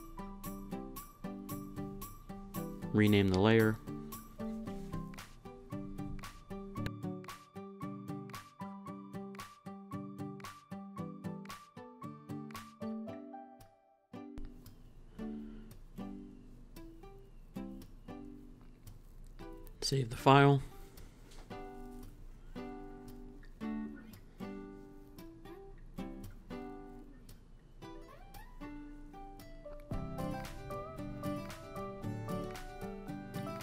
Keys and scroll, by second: 2.6-3.8 typing, 5.0-5.8 typing, 7.1 Up, 7.6 Down, 15.1 Down, 20.8 super+s, 25.4-27.0 typing, 30.8-33.4 typing.